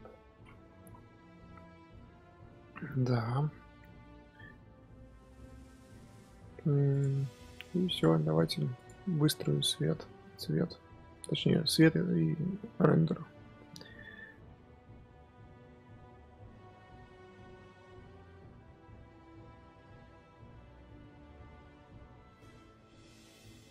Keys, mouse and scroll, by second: 0.2 scroll down 4, 0.8 z, 2.9-3.7 scroll up 1, 3.7-4.1 scroll down 4, 4.1 scroll up 2, 4.1-4.6 scroll down 1, 4.6-5.5 scroll up 1, 5.5 scroll down 1, 5.5-5.9 scroll up 1, 5.9-6.9 scroll down 6, 6.9 click, 7.0-7.9 scroll up 4, 7.9 click, 8.1-8.8 scroll down 3, 8.8 click, 11.8-12.3 scroll up 2, 12.3-14.1 scroll down 4, 14.1 KP_1, 14.7 r, 16.0 click, 16.1-17.8 typing, 18.7 click, 18.8-19.3 drag, 21.5 F12.